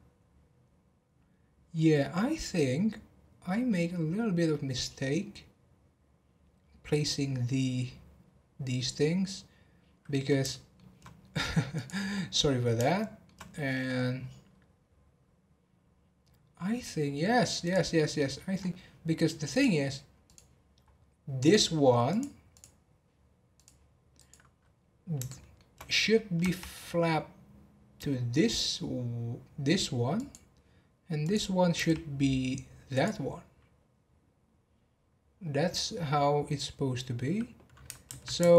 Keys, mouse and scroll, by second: 10.5-11.7 shift+middle drag, 11.7 click, 12.2-12.9 scroll up 1, 12.9-14.1 shift+middle drag, 14.1-14.7 scroll down 5, 17.6 click, 18.5 scroll up 1, 19.5-20.7 drag, 20.7 scroll up 1, 21.4 click, 22.1 click, 22.5 click, 23.5-24.3 drag, 24.8 scroll down 2, 25.3-26.4 shift+middle drag, 26.4 e, 31.2 click, 38.0 ctrl+z, 38.4 ctrl+z.